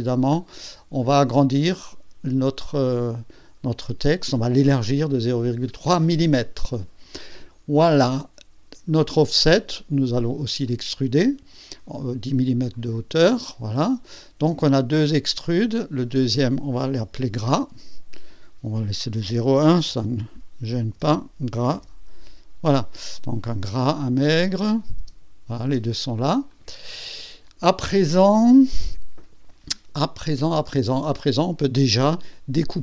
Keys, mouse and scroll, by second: 0.8-1.7 scroll up 6, 2.4 scroll down 2, 5.6 click, 9.0 click, 10.7 click, 12.7 click, 13.8 click, 16.1 click, 17.1 F2, 18.1 click, 19.9-22.3 typing, 24.7 click, 25.0 space, 25.6 space, 26.5 click.